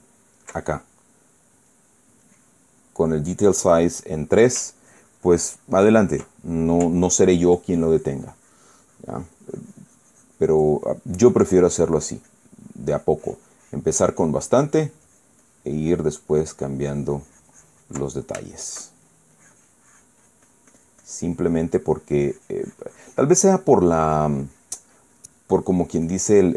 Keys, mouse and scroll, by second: 2.4-3.5 drag, 5.3-7.1 ctrl+drag, 7.1 ctrl+middle click, 7.7-17.0 ctrl+drag, 17.5-18.8 ctrl+drag, 19.2 shift+middle click, 20.1-24.1 shift+drag, 24.1 middle click, 24.6-26.1 drag, 26.3-26.5 drag.